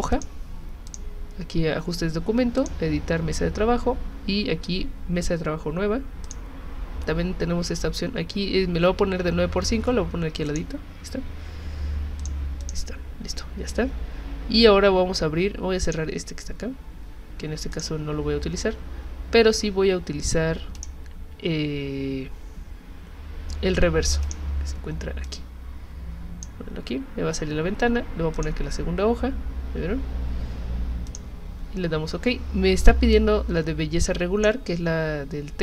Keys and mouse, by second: 0.1 click, 0.9 click, 2.6 click, 6.3 click, 10.5 click, 12.2 click, 12.6 click, 15.9 click, 17.7 click, 20.8 click, 24.2 click, 25.2-26.4 drag, 28.3 click, 31.1 click, 33.1-34.4 drag.